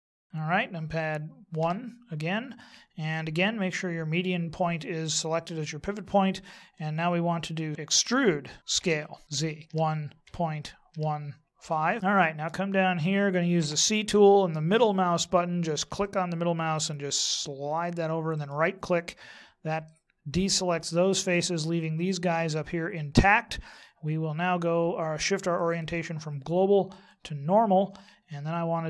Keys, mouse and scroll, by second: 0.1 shift+right click, 1.6 KP_1, 7.7 ctrl+z, 8.1 e, 12.0 middle click, 13.5 c, 18.4 right click, 19.8 middle click, 25.5 click.